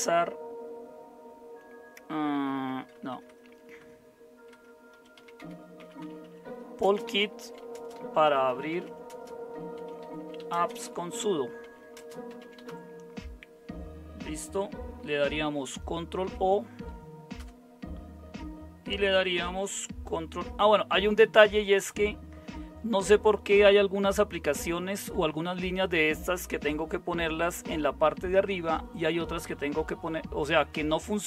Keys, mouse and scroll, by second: 2.9-13.1 typing, 16.2 ctrl+o, 17.4 Return, 21.5 Down, 21.7 Down, 22.6 Down, 23.6 Up, 25.2 Up.